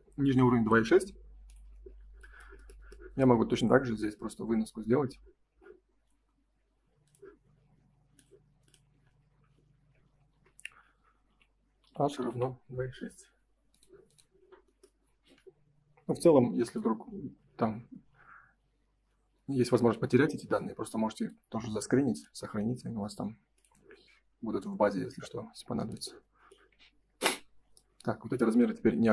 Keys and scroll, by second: 10.0 shift+h, 10.3 =, 16.2 Print.